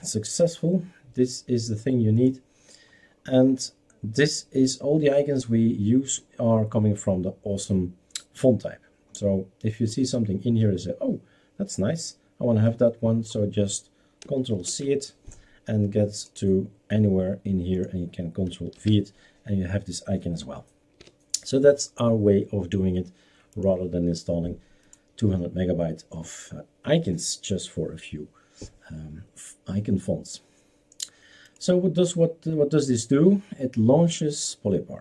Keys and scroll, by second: 14.7 ctrl+c, 18.8 ctrl+v, 21.0 BackSpace.